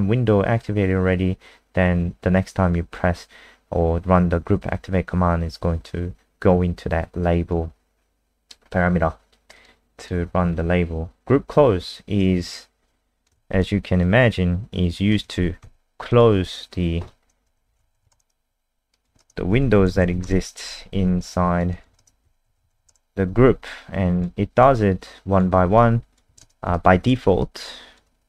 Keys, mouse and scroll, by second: 7.2 click, 8.4-9.5 scroll down 2, 9.6 click, 10.5 scroll down 2, 11.5-12.4 scroll down 1, 12.4 click, 13.3 ctrl+c, 13.5 click, 14.0 click, 15.3 ctrl+v, 15.6 ctrl+s, 16.1 click, 17.4-20.4 typing, 18.9 click, 19.2 ctrl+alt+space, 21.2 alt+click, 21.7 click, 22.0 ctrl+alt+space, 22.2-23.1 typing, 23.6 alt+click, 24.6 alt+click, 25.7 alt+click, 26.4 ctrl+alt+space, 26.7 alt+click.